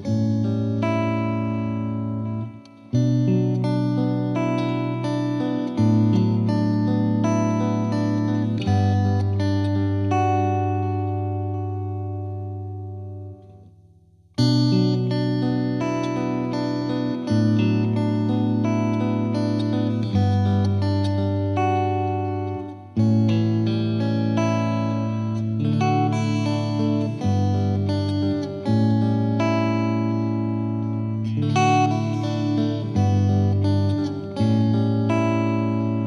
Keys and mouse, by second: 0.7 click, 2.5 click, 3.0 click, 3.6 click, 3.9 F2, 4.4 click, 5.6 click, 6.4 click, 8.5 click, 10.6 click, 11.9 click, 13.6 Escape, 14.0 click, 14.7 click, 15.8 Escape, 18.7 F2, 19.0 click, 21.0 click, 22.0 click, 23.3 click, 24.1 click, 25.2 click, 25.7 shift+click, 26.6 click, 27.2 click, 27.4 ctrl+z, 27.6 ctrl+z, 28.4 click, 28.5 click, 29.0 click, 29.3 click, 29.3 click, 29.7 click, 29.7 click, 32.1 click, 32.5 click, 33.6 click, 34.8 click, 35.2 click, 35.8 click.